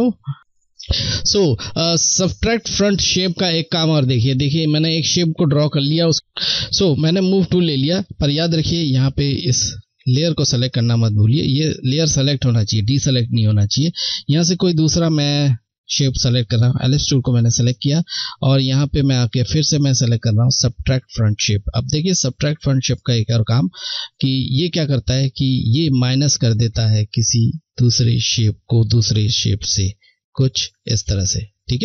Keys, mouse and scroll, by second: 10.5 click, 10.6 click, 13.5 click, 20.8 click, 26.2 click.